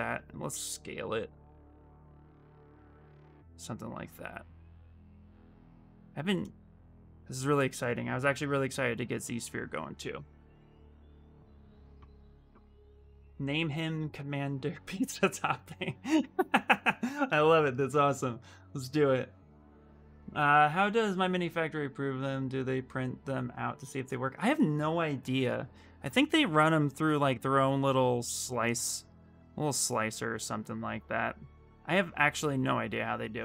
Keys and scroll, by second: 33.2 alt+Tab.